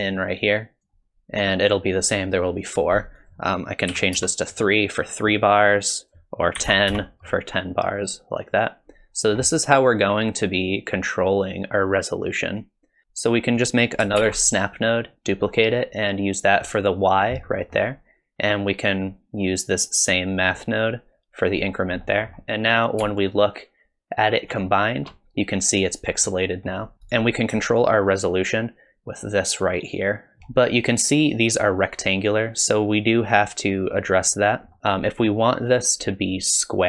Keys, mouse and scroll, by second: 3.2 click, 6.0 click, 12.6 click, 13.0 ctrl+z, 14.2 shift+d, 17.5 middle click, 18.9 click, 22.0 middle click, 24.5 ctrl+shift+click, 26.3 middle click, 26.9 shift+click, 27.8 shift+click, 30.4 middle click, 34.7 middle click, 34.8 click.